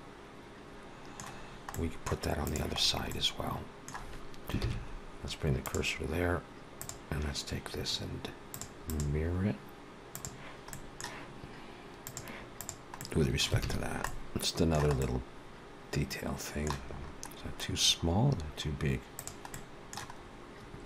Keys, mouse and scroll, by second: 1.2-1.6 scroll down 2, 1.6 middle click, 2.3 click, 2.6-3.2 scroll down 3, 2.9 middle click, 4.4 shift+s, 6.6 click, 8.4 click, 8.7 click, 10.6 middle click, 11.9 click, 12.8 middle click, 13.5 alt+a, 13.6-13.9 scroll down 3, 13.8 middle click, 14.8 middle click, 16.7-17.3 scroll up 1, 17.3-17.8 scroll up 6, 18.1-18.7 scroll down 4, 19.0 click, 19.4 middle click, 20.0-20.7 scroll up 2.